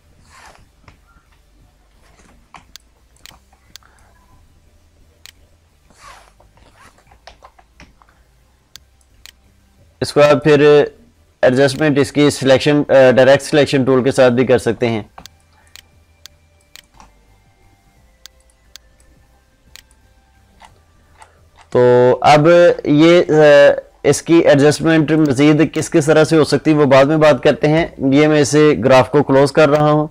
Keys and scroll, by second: 2.5 ctrl+space, 7.1 ctrl+z, 27.7 ctrl+shift+i.